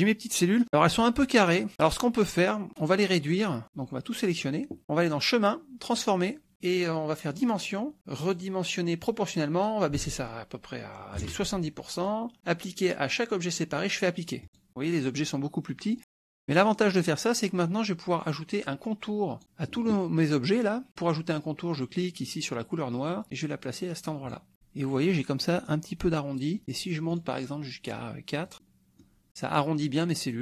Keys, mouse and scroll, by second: 3.6 click, 5.0 click, 6.1 click, 7.4 click, 8.2 click, 9.6 click, 10.0 ctrl+a, 11.2 KP_7, 14.4 click, 16.0 middle click, 16.8 middle click, 17.6 click, 18.7 click, 23.0-24.5 drag, 25.0 middle click, 26.4 middle click, 27.2 right click, 28.5 click, 28.6 click, 28.6 middle click.